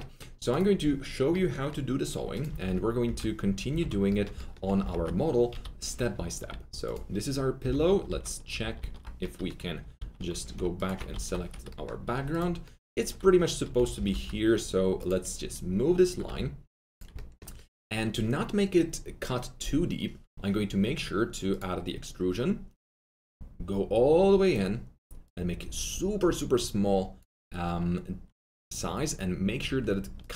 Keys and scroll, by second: 2.4 F3, 2.6 F3, 3.0 F4, 3.6 alt+w, 4.6 alt+F3, 4.8 F4, 5.5 F3, 8.0 alt+w, 8.7 alt+q, 9.9 alt+q, 13.7 F3, 13.9 F3, 14.0 F4, 16.2 2.